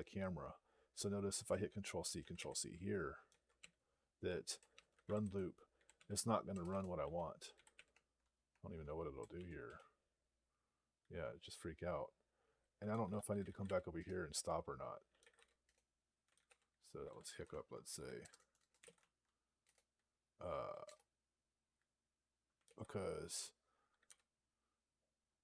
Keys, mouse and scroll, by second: 2.2 ctrl+c, 4.3-8.1 typing, 8.3 Tab, 9.2 ), 9.5 Return, 13.8 Return, 15.5 Return, 16.7-19.2 typing, 19.5 Return, 21.2 Return.